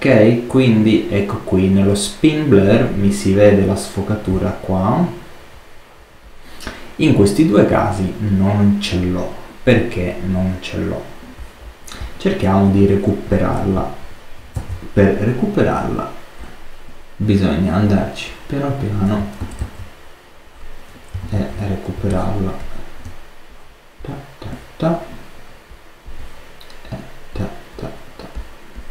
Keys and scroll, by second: 14.5 super+z, 19.5 super+z, 21.2 alt+super+z, 21.8 alt+super+space.